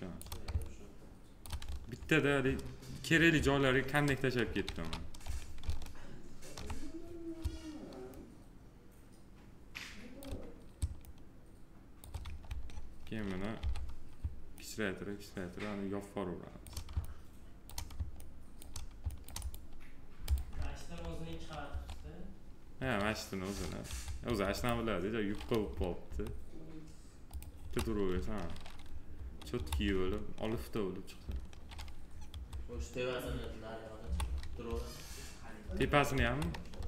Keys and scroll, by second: 4.4 ctrl+z, 13.3 r, 21.4 2, 25.3 F4, 27.4 F4, 28.9 F4, 35.4 w.